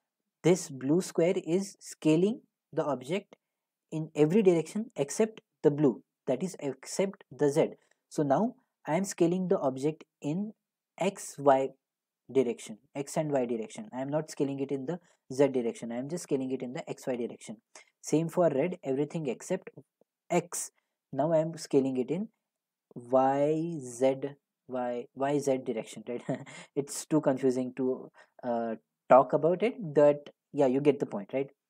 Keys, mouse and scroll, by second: 17.4 click, 31.4-31.6 drag.